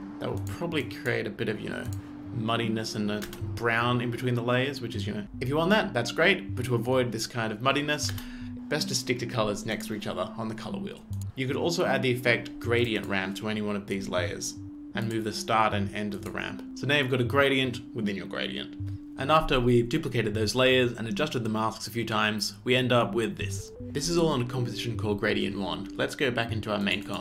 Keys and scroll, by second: 3.3 space, 5.2 space, 8.1 space, 18.8 space.